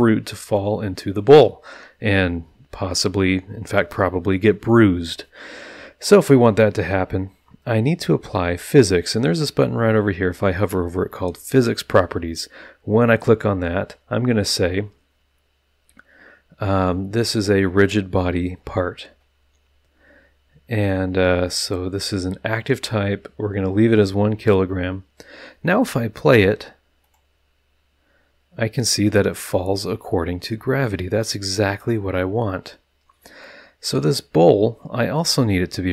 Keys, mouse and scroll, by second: 0.4 click, 11.5 click, 17.3 click, 27.0 click, 29.4 click, 31.6 click, 33.9 click.